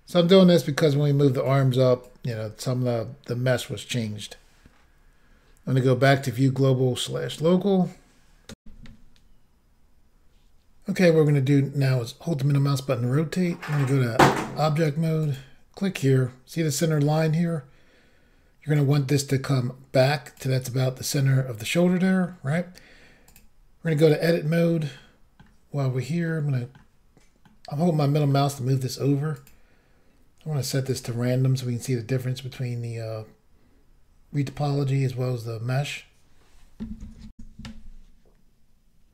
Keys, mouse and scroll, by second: 2.1 shift+click, 6.3 click, 7.4 middle click, 8.6 Insert, 11.0 middle click, 13.7 click, 14.2 click, 14.3 double click, 15.2 double click, 15.3 double click, 18.7 click, 21.1 middle click, 23.3 click, 24.0 click, 25.0 middle click, 26.2 middle click, 27.4 middle click, 29.4 click, 30.9 click, 31.0 click, 37.4 Insert.